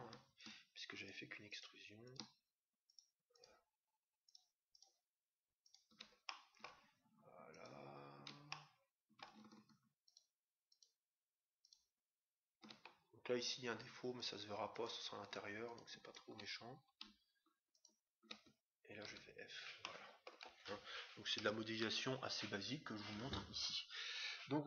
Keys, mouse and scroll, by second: 0.3-7.3 right drag, 6.2-7.8 middle drag, 7.4-9.1 right drag, 8.4-10.1 middle drag, 10.1-13.4 right drag, 12.8-14.8 middle drag, 14.1-17.5 right drag, 16.6-17.5 scroll down 1, 17.5 scroll down 1, 17.6-19.6 right drag, 19.1 f, 19.8-21.3 middle drag, 21.3 Tab.